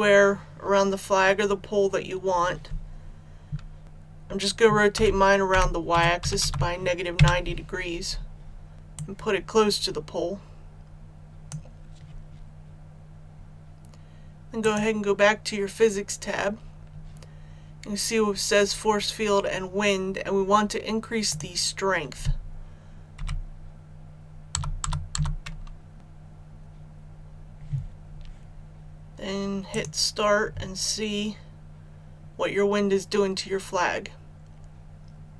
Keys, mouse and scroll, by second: 3.8 ctrl+z, 4.9 r, 5.4 y, 6.1 KP_9, 8.9-11.8 drag, 12.4-13.0 scroll up 1, 14.6 click, 23.2 KP_1, 24.5 KP_0, 25.9-26.6 scroll up 1, 29.7 click.